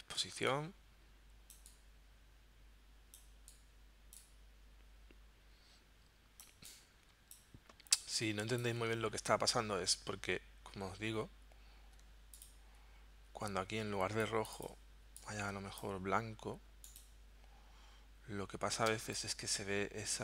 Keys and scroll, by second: 6.5 space, 19.0 space.